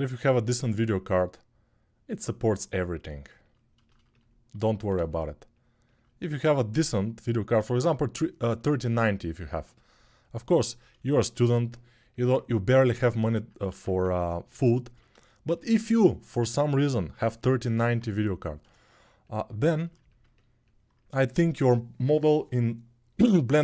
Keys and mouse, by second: 4.3 alt+q, 6.0 1, 13.5 alt+q, 17.4-20.1 alt+right drag, 20.1-23.6 ctrl+drag.